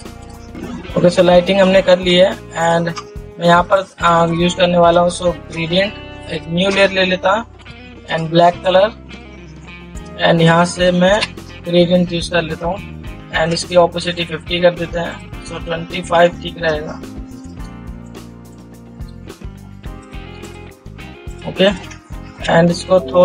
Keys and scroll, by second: 22.7 ctrl+t.